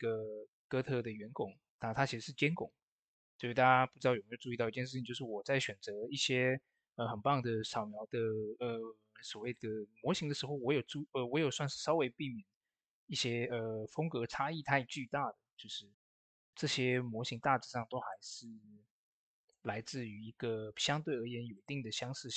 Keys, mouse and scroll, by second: 4.4 click, 4.4 typing, 4.4 click, 9.3 click, 9.3 typing, 9.3 click, 14.9 click, 14.9 typing, 19.4 ctrl+l, 21.4 click.